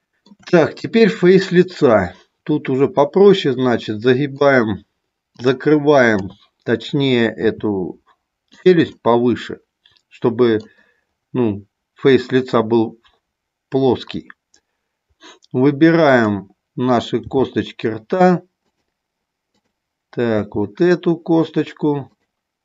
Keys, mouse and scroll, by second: 1.6-4.4 middle drag, 5.4 click, 6.1 KP_3, 7.5 r, 8.6 click, 8.8-10.5 middle drag, 16.0 click, 17.2 g, 20.4 g.